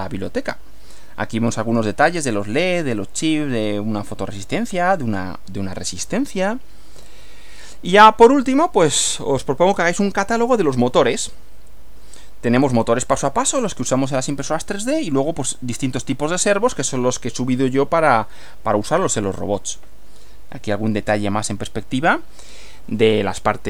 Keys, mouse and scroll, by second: 0.2 Right, 7.0 Right, 18.4 Right.